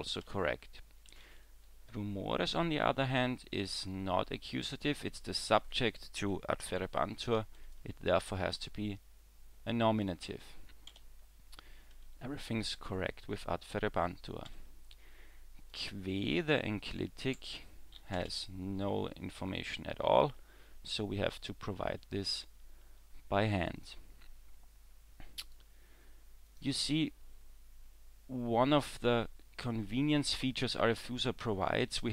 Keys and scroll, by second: 0.2 w, 10.9 w, 14.5 w.